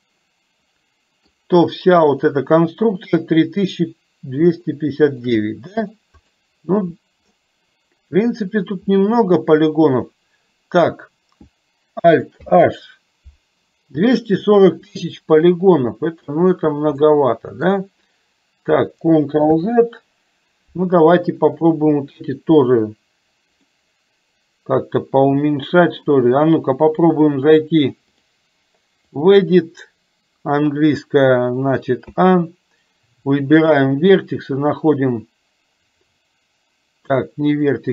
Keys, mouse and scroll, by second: 0.1-1.3 middle drag, 1.8 click, 4.7 shift+middle click, 5.5 middle click, 6.3 click, 12.6 alt+h, 17.1-18.2 middle drag, 19.5 ctrl+z, 23.8-26.2 drag, 28.2-29.3 drag, 32.2 a, 33.7-37.4 drag.